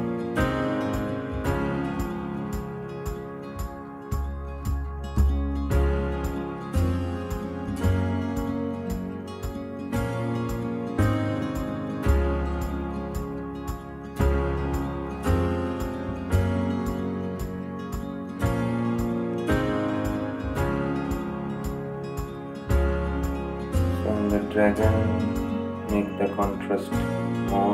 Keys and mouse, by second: 0.1 ctrl+t, 1.7-11.3 drag, 16.4-27.7 drag.